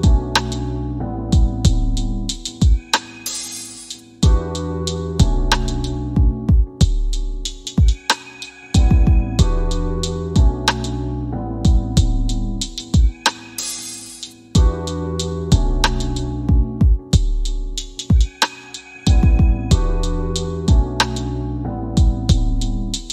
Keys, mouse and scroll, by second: 4.2 space, 5.6-7.0 middle drag, 9.8 space, 11.4 shift+Left, 12.9 middle click, 19.0 click.